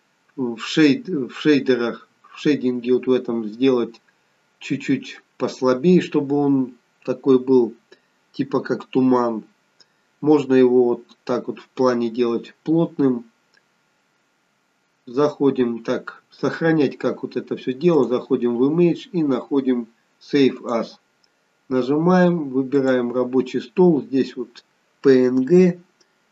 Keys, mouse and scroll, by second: 11.2-11.8 scroll up 1, 12.4-12.8 scroll down 1, 13.8-14.2 scroll up 1.